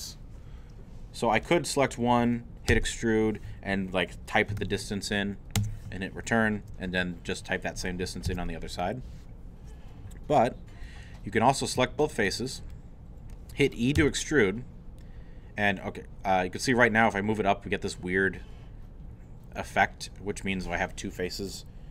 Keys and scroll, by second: 2.7 e, 4.3-5.1 typing, 5.6 Return, 8.3 ctrl+z, 14.0 e.